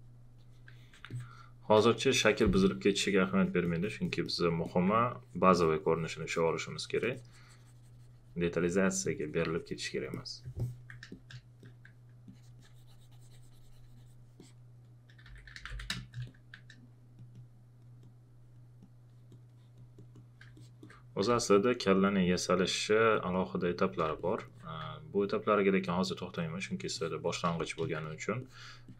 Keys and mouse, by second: 1.9 space, 2.0 click, 11.1 space, 11.1 click, 12.2 click, 15.0-16.2 typing, 16.0 click, 16.9 click, 20.5 alt+click, 21.3 space, 21.3 click, 25.7 click, 27.5 space, 27.6 click.